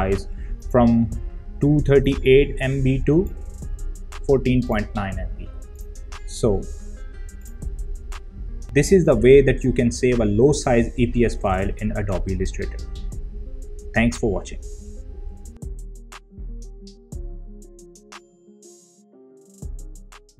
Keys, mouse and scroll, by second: 0.4 right click, 3.0 click.